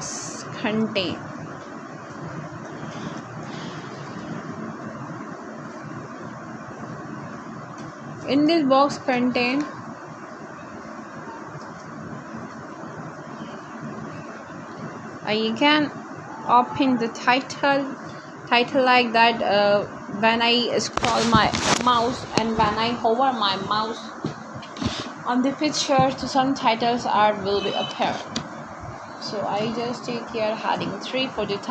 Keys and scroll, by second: 14.0-15.7 typing, 19.4 space, 19.9 c, 20.2 l, 20.9 Return, 23.7-26.4 typing, 28.3 Right, 29.1 shift+., 29.5 shift+,, 30.3 BackSpace.